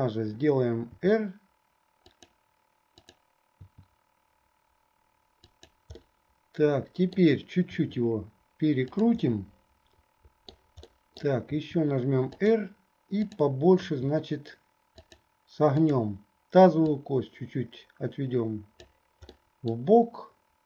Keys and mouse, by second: 0.9 r, 3.8 r, 6.2-7.4 drag, 6.2-7.4 right drag, 9.5-10.7 drag, 11.0 click, 11.7 r, 13.9 r, 15.9 click, 17.3-19.5 drag, 19.5 middle click.